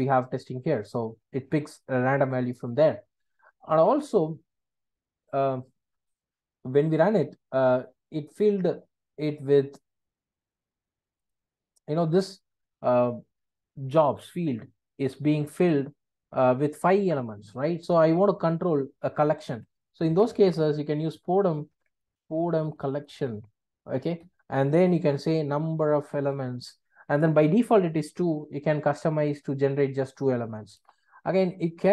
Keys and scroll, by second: 24.2 Return.